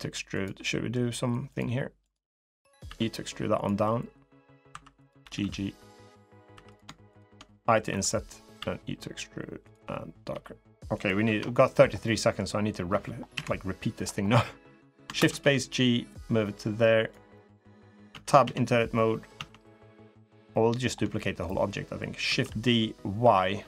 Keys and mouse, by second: 0.4 middle click, 1.8 click, 2.2 click, 2.7 e, 3.6 middle click, 4.5 2, 5.0 g, 6.3 3, 7.6 i, 8.3 e, 10.1 g, 11.0 Tab, 11.8 middle click, 13.1 KP_7, 14.9 shift+space, 15.9 click, 17.1 middle click, 17.9 Tab, 18.2 a, 18.7 middle click, 19.1 Tab, 20.3 middle click, 20.9 shift+middle click, 22.0 shift+d.